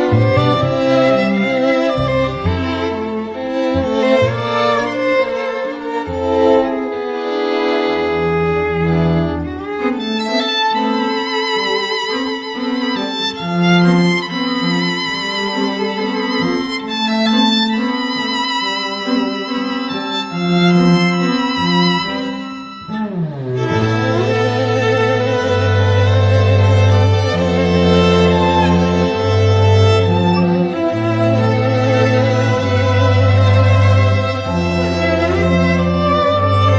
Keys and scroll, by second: 28.2 ].